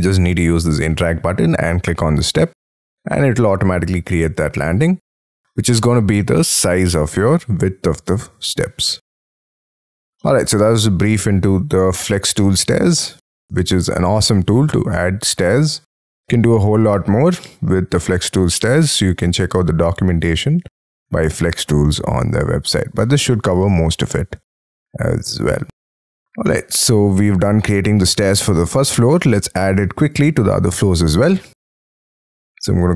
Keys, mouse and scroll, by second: 4.7-5.2 scroll up 4, 5.2 middle click, 9.0-9.9 scroll down 11, 10.2 middle click, 12.2-12.8 scroll up 11, 13.1 middle click, 22.3-22.9 scroll down 6, 22.9 middle click, 26.9 middle click, 28.4 scroll up 5, 28.9-29.3 scroll down 6.